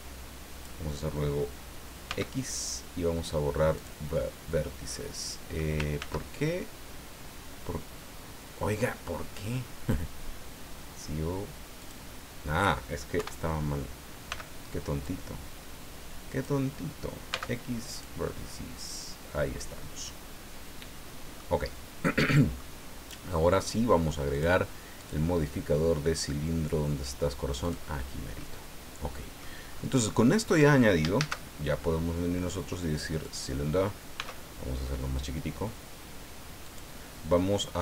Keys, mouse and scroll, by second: 2.1 x, 3.7 click, 4.9 middle click, 6.0 ctrl+z, 11.8 click, 13.2 KP_1, 14.3 b, 15.0-16.6 drag, 17.3 x, 17.9 click, 18.4-21.5 middle drag, 22.1 middle click, 24.3 click, 25.0 click, 27.6 click, 28.4-29.6 middle drag, 29.7 scroll up 2, 31.1 shift+a, 33.2 click, 34.1 s, 36.6 click.